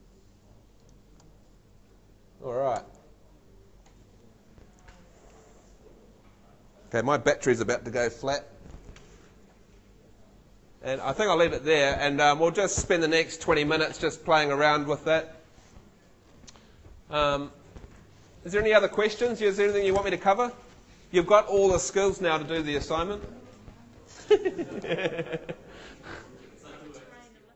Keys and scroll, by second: 1.4 Escape, 2.9 F2.